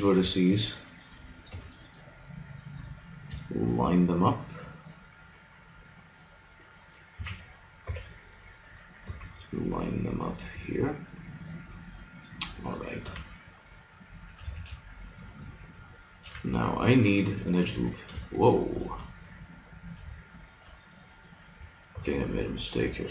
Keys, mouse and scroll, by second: 1.0 middle click, 1.5 g, 6.3 click, 7.2 a, 7.9 b, 9.0 g, 12.8 click, 13.0-15.0 middle drag, 14.4 a, 15.4 middle click, 17.1 middle click, 21.9 b.